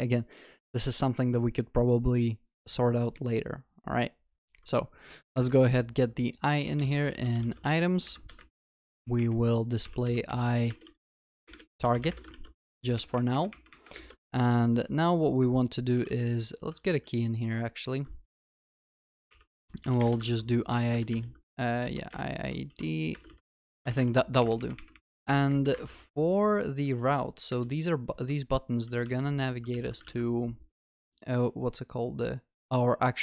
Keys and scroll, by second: 8.3 Escape, 12.4 ctrl+s, 18.0 Tab, 20.3 ctrl+s, 20.9 ctrl+BackSpace, 24.1 ctrl+s, 29.8 ctrl+s.